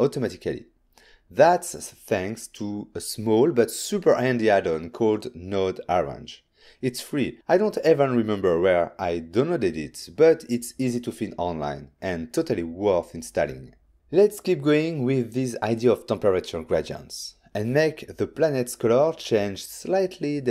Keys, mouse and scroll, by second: 0.4 click, 1.5 click, 2.4 n, 3.0 middle click, 8.2 middle click, 13.1 click, 17.0 middle click, 17.7 middle click, 20.1 scroll up 3.